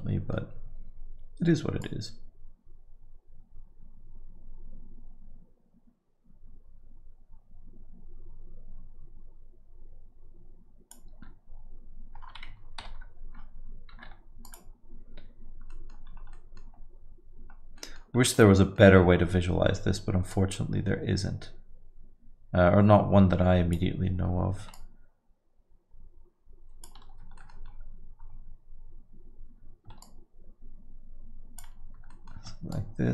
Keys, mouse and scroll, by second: 0.1 Tab, 1.8 click, 13.0 ctrl+i, 14.0 x, 15.7 middle click, 16.1 scroll up 3, 16.3 middle click, 16.6 scroll down 4, 17.8 middle click, 18.2-18.6 scroll up 1, 18.6 middle click, 20.3 click, 24.7 shift+click, 27.4 middle click, 27.7 scroll up 5, 28.2 scroll down 7, 29.1-29.5 scroll up 5, 30.0 shift+click, 32.1 middle click, 32.7 shift+click.